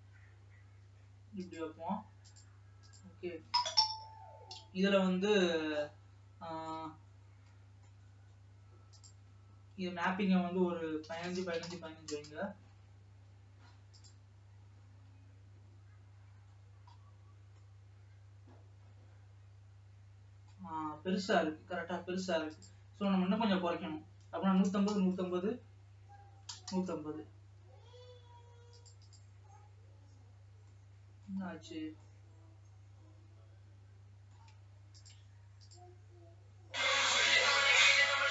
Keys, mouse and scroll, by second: 2.7 click, 5.2-8.4 middle drag, 8.4 scroll up 2, 11.4-16.5 drag, 16.5 scroll up 4, 18.0-21.2 middle drag, 21.2 scroll up 1, 24.9-29.4 drag, 35.2 click, 35.5 Tab, 35.9-37.1 drag, 37.1 Tab.